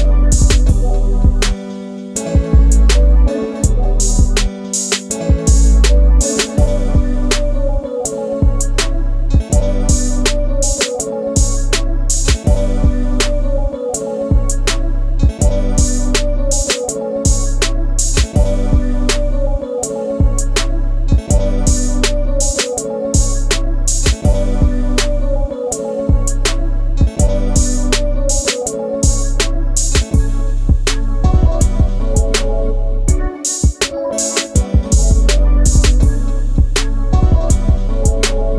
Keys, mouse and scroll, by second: 4.5 m, 5.4 click, 5.7 middle click, 5.7 shift+double middle click, 7.1 space, 9.7 f, 10.9 space, 12.4 p, 13.8 space, 13.9 Escape, 14.6 middle click, 21.7 ctrl+c, 21.9 Escape, 22.0 Escape, 22.5 ctrl+v, 22.7 shift+middle click, 25.1 l, 26.9 space, 27.6 e, 29.9 middle click, 30.6 p, 32.2 space, 33.1 ctrl+g, 37.3 s.